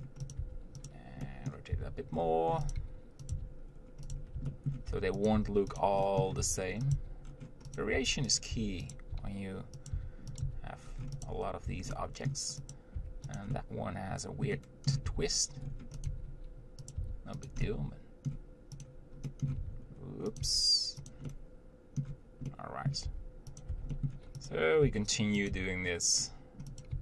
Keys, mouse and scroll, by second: 0.0 middle click, 0.5 click, 0.7 Tab, 1.1 click, 1.5 middle click, 2.0 r, 3.0 g, 3.6 r, 4.7 shift+middle click, 5.2 Tab, 5.5 click, 5.6 Tab, 6.0 click, 6.3 middle click, 6.6 r, 7.2 g, 8.2 Tab, 8.6 click, 8.8 Tab, 9.2 click, 9.4 g, 10.2 r, 10.7 g, 11.9 Tab, 12.2 middle click, 13.0 click, 13.2 Tab, 13.6 click, 13.8-15.3 middle drag, 15.3 r, 16.3 g, 17.2 r, 17.9-19.1 middle drag, 19.1 click, 19.5 middle click, 19.8 r, 20.7 g, 21.5-23.3 middle drag, 23.3 Tab, 23.9 click, 23.9 Tab, 24.2 middle click, 24.7 click, 25.1 g, 25.7 r.